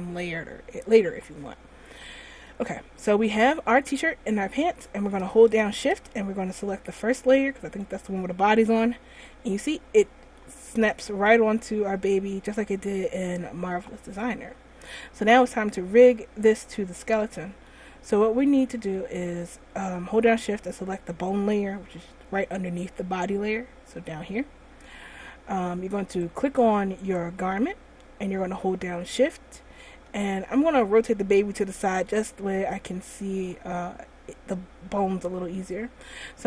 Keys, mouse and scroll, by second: 2.7-3.1 middle click, 2.8 middle click, 3.3 middle click, 3.7 middle click, 7.9 shift+click, 9.3 middle click, 9.6 middle click, 9.8 middle click, 10.3 middle click, 11.2 middle click, 11.7 middle click, 11.8 middle click, 12.2 middle click, 14.5 scroll up 1, 15.3 scroll down 1, 15.7 middle click, 17.0 middle click, 17.6 middle click, 18.6 middle click, 21.5 shift+click, 26.6 right click, 27.4 right click, 30.8 middle click, 31.0 middle click, 33.1 shift+middle click.